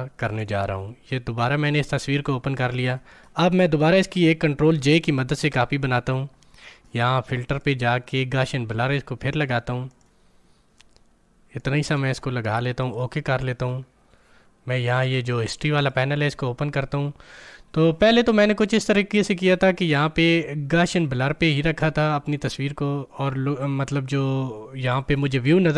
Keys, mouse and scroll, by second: 5.4 ctrl+j, 7.4 click, 9.8-15.0 drag, 15.7 click, 21.2 click.